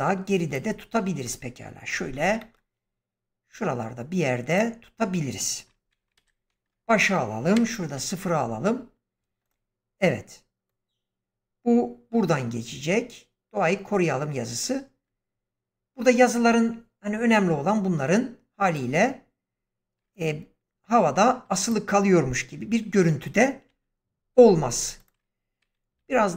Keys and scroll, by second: 2.1 g, 6.1 shift+Left, 7.5 0, 23.6 g, 25.9 s.